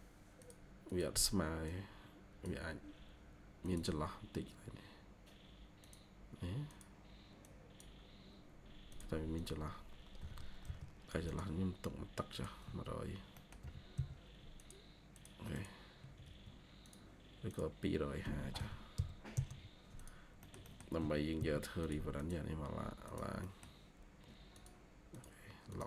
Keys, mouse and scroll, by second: 0.8 double click, 9.3 double click, 10.1-10.5 typing, 12.5 Escape, 12.7 Escape, 12.9 scroll up 1, 13.3 middle click, 13.5 typing, 15.4 double click, 15.9 Escape, 16.1 scroll up 1, 17.9-19.3 typing, 20.3 middle click, 21.0-21.8 typing, 22.1 double click, 23.3 middle click.